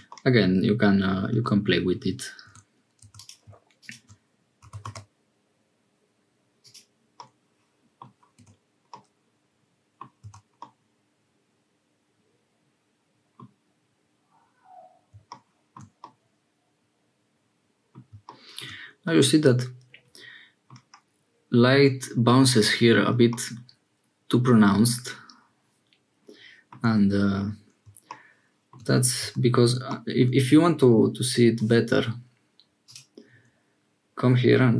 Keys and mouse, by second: 0.0-1.3 drag, 1.3 Tab, 2.4 1, 4.5 g, 7.2 middle click, 8.4 1, 8.9-10.0 middle drag, 10.2 Tab, 10.5-13.4 middle drag, 16.0-18.0 middle drag, 19.1-20.8 drag, 23.4-26.8 drag, 26.9 Tab, 29.2 Tab, 32.8-34.7 drag.